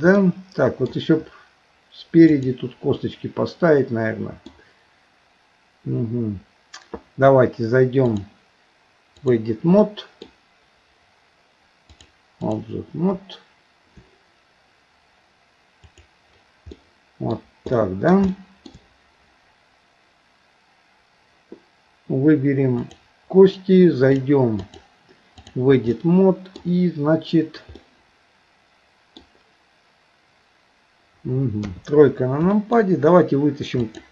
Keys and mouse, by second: 0.2 middle click, 2.3 click, 3.0-4.5 middle drag, 8.0-9.5 drag, 9.8 middle click, 12.0 click, 15.9 click, 16.8 middle click, 17.8 middle click, 18.3 shift+middle click, 22.8 click, 24.6-25.6 drag, 26.0 middle click, 27.8-29.2 middle drag, 31.7 KP_3, 32.5 shift+middle click, 33.8 click.